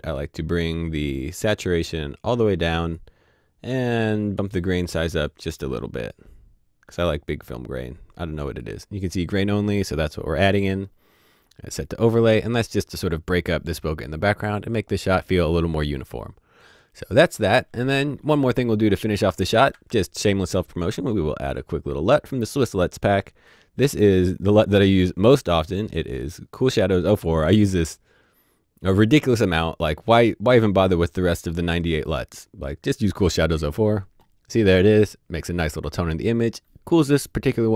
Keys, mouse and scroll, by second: 2.1 click, 5.2 click, 10.4 click, 16.2-16.6 scroll down 1, 16.6-17.8 scroll up 1, 19.2 alt+Num_Lock, 19.2-19.5 alt+scroll up 1, 19.5 alt+s, 20.6 right click, 33.1 click.